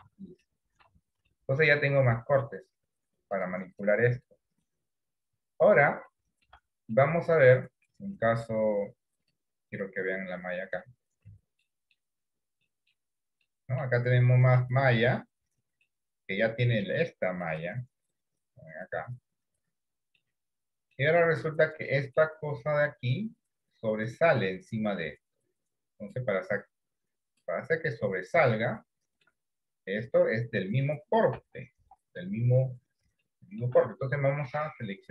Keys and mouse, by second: 0.1 Tab, 0.6 middle click, 1.0 Tab, 1.4 middle click, 6.2 shift+middle click, 7.0 middle click, 11.8 middle click, 12.9 middle click, 13.6 middle click, 14.8 middle click, 15.9 middle click, 17.6-20.3 middle drag, 21.0 middle click, 22.0 middle click, 26.0-27.5 drag, 28.9 shift+middle click, 30.6 middle click, 31.5 KP_1, 32.1 KP_3, 33.5 shift+middle click.